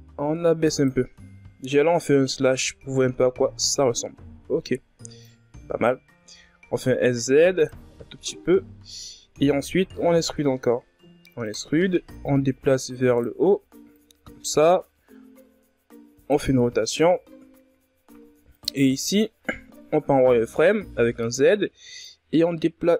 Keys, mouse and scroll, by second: 0.6 KP_Divide, 1.6-2.4 ctrl+scroll up 8, 2.4-3.5 shift+scroll up 5, 3.5-4.4 ctrl+scroll down 1, 4.4 click, 5.4 s, 6.9-7.7 scroll down 4, 8.1-8.8 scroll up 2, 8.8 e, 11.3 click, 13.1 click, 13.9 r, 15.7-16.2 scroll down 1, 16.3-17.6 scroll up 9, 17.6 right click, 17.9 z, 20.5 b, 21.1-22.9 drag.